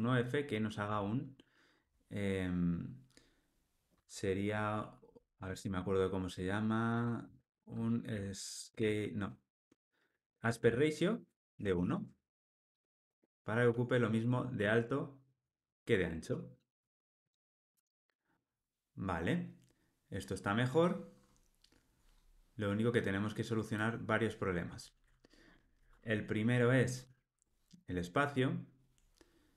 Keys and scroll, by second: 11.2 Return, 16.2 alt+super+l.